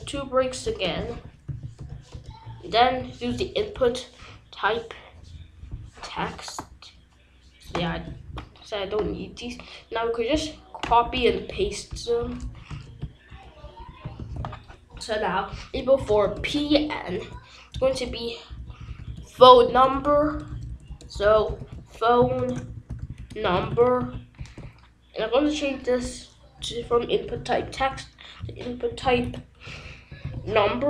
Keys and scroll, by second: 0.9 ctrl+z, 0.9-3.5 typing, 3.7 Return, 7.9 BackSpace, 11.2 ctrl+c, 12.6 Return, 13.3 ctrl+v, 14.1 ctrl+s, 15.9 Left, 16.2 BackSpace, 16.3 p, 16.6 Right, 19.3 BackSpace, 21.0-24.2 typing, 24.3 ctrl+s, 26.5 BackSpace, 28.6-30.7 typing.